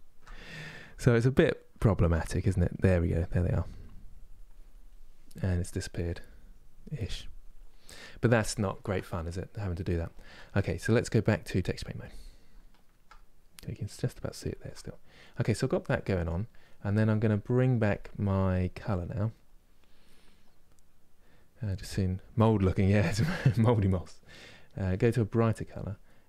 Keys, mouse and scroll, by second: 2.4-8.1 drag, 8.1-11.3 ctrl+middle drag, 11.3 click, 11.8-26.2 middle drag.